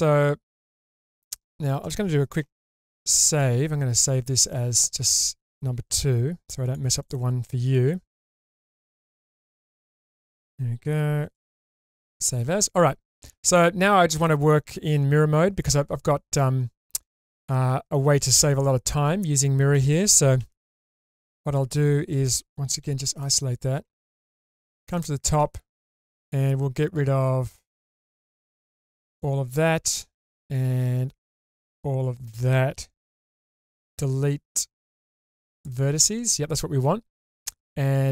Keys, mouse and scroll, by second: 1.3 shift+middle click, 2.9 ctrl+shift+s, 17.0-19.7 middle drag, 20.4 alt+z, 20.9 middle click, 21.5 middle click, 22.8 /, 23.2-24.6 middle drag, 24.9 shift+middle click, 26.9-29.2 drag, 30.5 shift+click, 33.3 x.